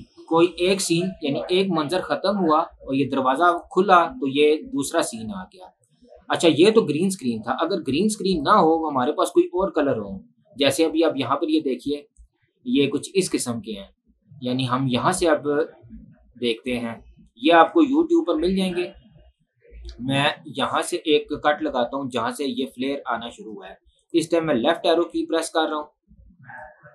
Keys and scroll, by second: 8.6 Delete, 22.1 Left.